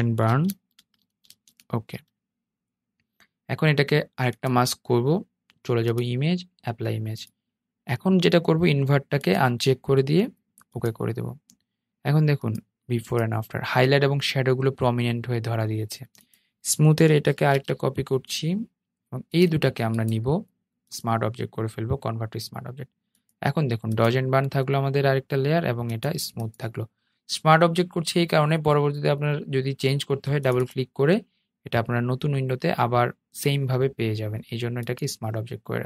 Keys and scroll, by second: 16.5 super+j.